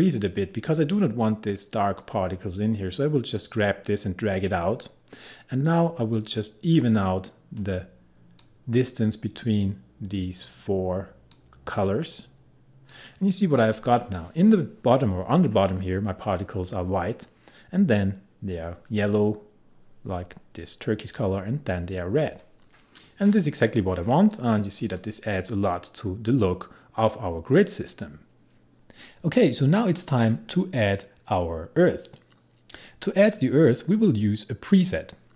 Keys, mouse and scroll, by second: 3.4-24.4 drag, 24.4-28.7 drag.